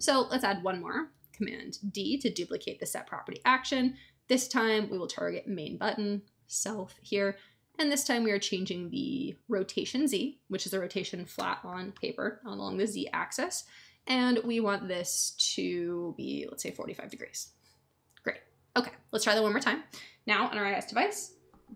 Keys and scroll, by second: 1.3 super+d, 16.4-17.3 typing.